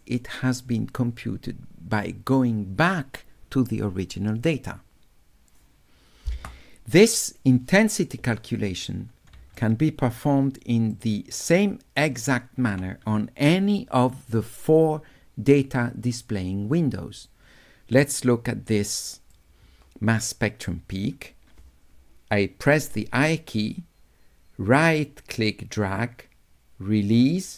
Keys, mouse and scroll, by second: 9.6 shift+right click, 11.0 shift+right click, 11.0 shift+click, 11.2 shift+right click, 15.2 scroll down 2, 17.3-19.4 drag, 23.4-27.2 right drag.